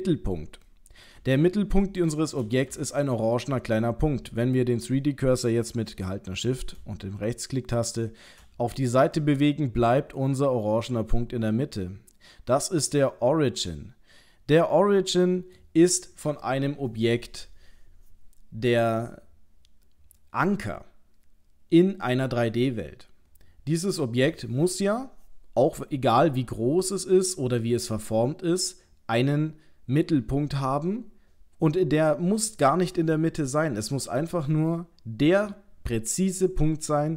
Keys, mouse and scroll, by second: 0.7 middle click, 1.4 shift+middle click, 2.8 ctrl+middle click, 7.8 shift+right click, 9.2 middle click, 11.2 middle click.